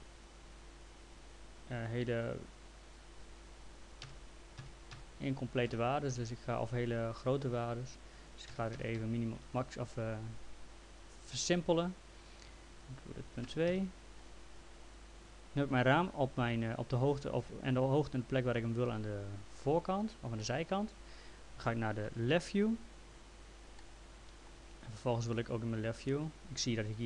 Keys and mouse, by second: 0.3 click, 1.9 click, 4.0 KP_1, 4.6 KP_Decimal, 4.9 KP_1, 5.7 KP_Enter, 7.1 click, 8.5 KP_1, 8.8 KP_Decimal, 9.0 KP_5, 9.4 KP_Enter, 12.1 click, 13.3 KP_Decimal, 13.4 KP_2, 13.7 Return, 20.4 middle click, 23.8 middle click.